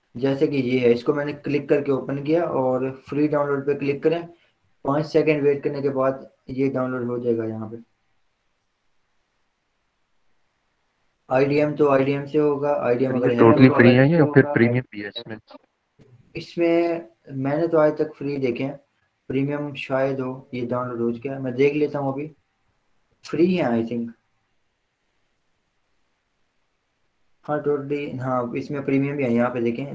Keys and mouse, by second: 3.5 click, 19.7 click.